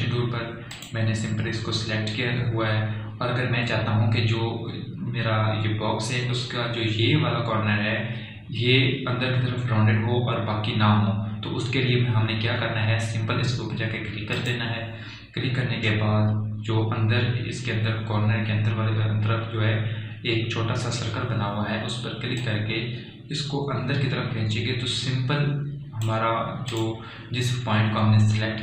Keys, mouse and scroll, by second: 1.0 click, 15.8 click, 23.9-28.1 drag.